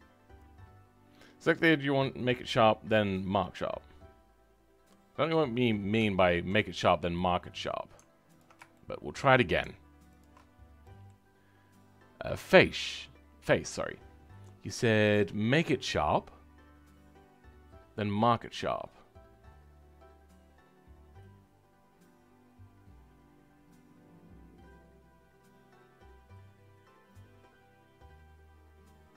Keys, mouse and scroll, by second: 6.6-7.1 scroll up 2, 7.1-8.3 middle drag, 8.3 alt+click, 8.7-10.2 shift+middle drag, 10.2 alt+shift+click, 10.4-10.8 scroll down 2, 10.8-29.1 middle drag.